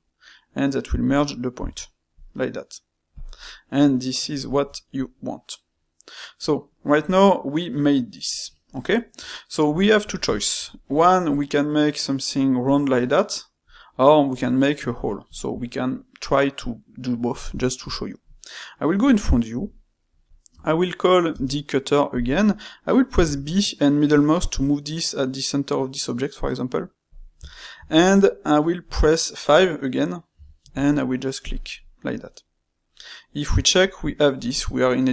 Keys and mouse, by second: 3.3-7.9 middle drag, 8.7-19.5 ctrl+shift+middle drag, 19.5 KP_1, 20.5 space, 21.3 space, 27.4-30.5 shift+middle drag, 32.9-35.1 middle drag.